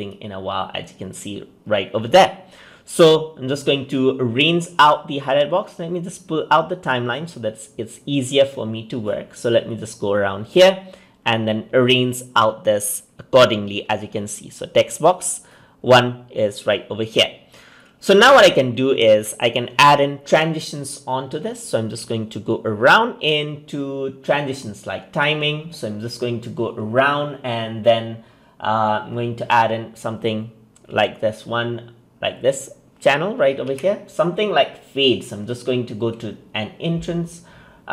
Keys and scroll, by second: 33.6 ctrl+z.